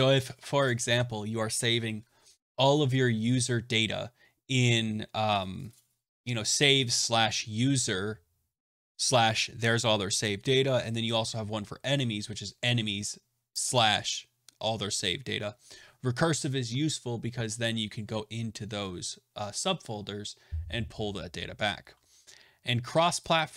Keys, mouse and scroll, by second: 23.1 click, 23.3 click.